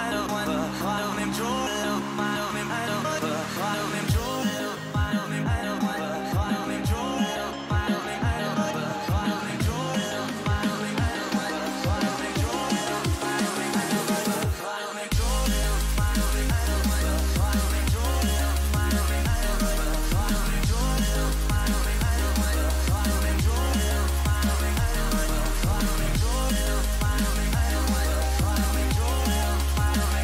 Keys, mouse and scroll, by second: 3.6-7.0 middle drag, 6.8-9.0 drag, 7.0 right click, 9.0 a, 9.4-12.0 middle drag, 14.2 KP_3, 17.7-20.3 middle drag, 19.9 a, 20.3 a, 21.3-22.4 drag, 21.8 a, 22.1 a, 22.4-25.3 middle drag, 26.3 ctrl+b.